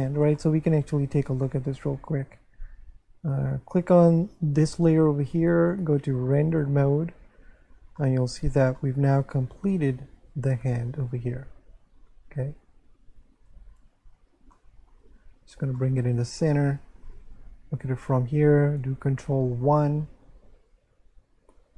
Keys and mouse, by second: 1.4 shift+middle click, 3.7 shift+click, 5.6 click, 8.0 middle click, 8.8 shift+middle click, 13.2 1, 14.6 shift+middle click, 15.8 shift+middle click, 19.3 ctrl+1.